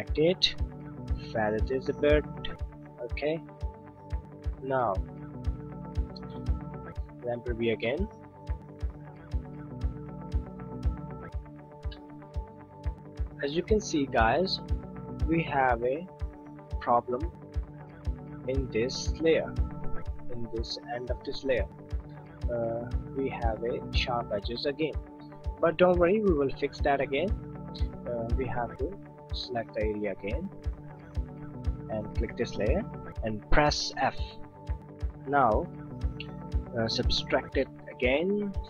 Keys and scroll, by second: 33.7 f.